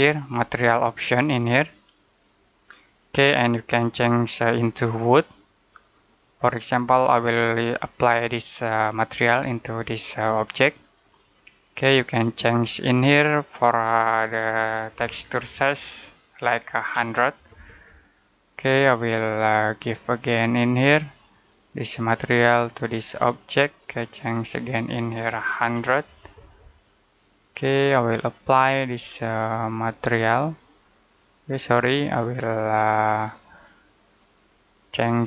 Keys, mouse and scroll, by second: 0.1 click, 8.8 click, 16.6-17.4 typing, 19.7 click, 25.5 typing, 28.1 click.